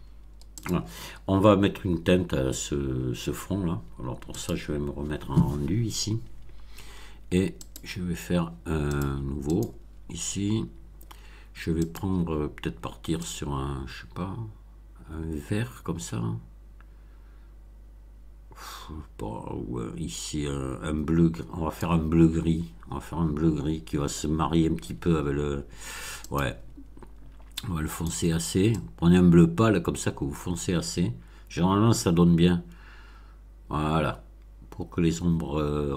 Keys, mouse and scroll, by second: 0.5 click, 4.3 click, 7.6 click, 8.9 click, 9.4 click, 11.8 click, 13.1-21.9 drag, 26.2 click, 27.5-28.2 drag, 28.7-35.9 drag.